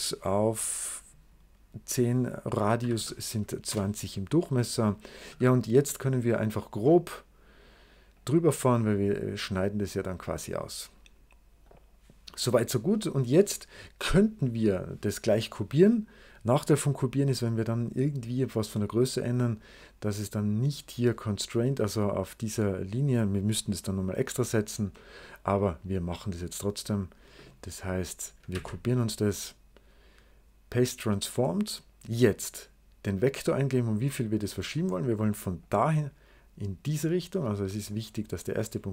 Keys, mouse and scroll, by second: 2.4-3.3 typing, 3.5 Return, 5.1 s, 6.1 click, 7.0 click, 8.0 click, 9.0 click, 10.0 click, 10.8-12.2 scroll down 3, 11.5 right click, 12.5-13.1 scroll up 1, 18.1 click, 19.3-20.5 drag, 26.1-27.1 drag, 28.4 ctrl+c, 29.3 right click, 30.6 click, 34.0 right click, 35.5 click, 37.9 click.